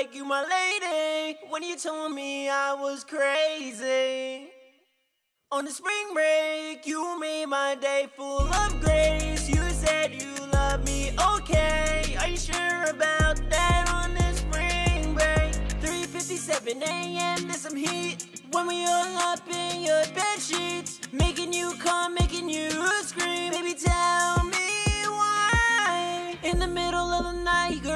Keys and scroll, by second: 1.1 ctrl+super+w, 3.6 F12, 8.1 super+s, 27.5-27.9 typing.